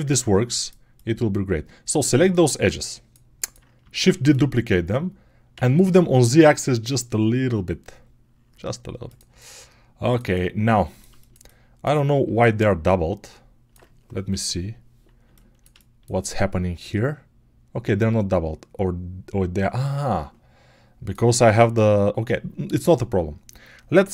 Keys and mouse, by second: 3.8 shift+d, 14.2 /.